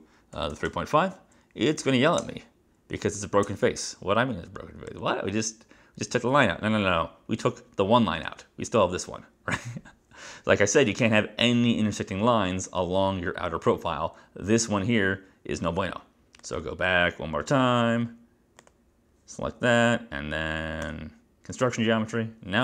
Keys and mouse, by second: 0.2-1.2 typing, 2.3 Return, 3.5 Return, 5.0 click, 16.6 click, 18.7 click, 21.0 click.